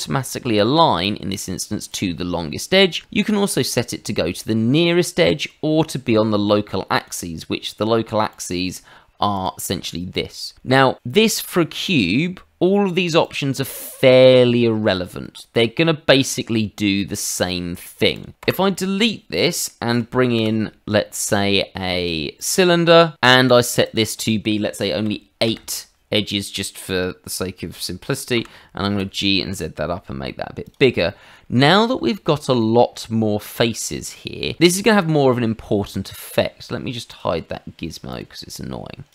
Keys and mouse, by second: 0.9 click, 1.9 click, 6.9 click, 8.3 click, 9.3 click, 13.2 click, 16.3 click, 17.4 click, 18.1 click, 18.4 Delete, 19.3 middle click, 20.3 shift+a, 22.4 click, 23.8 click, 25.0 KP_8, 25.4 Return, 28.3 g, 29.0 z, 29.5 click, 30.1 s, 30.6 click, 31.0 shift+middle click, 31.6 shift+middle click, 32.0 middle click, 32.6 shift+middle click, 33.0 middle click, 37.1 click, 38.1 click, 39.0 click.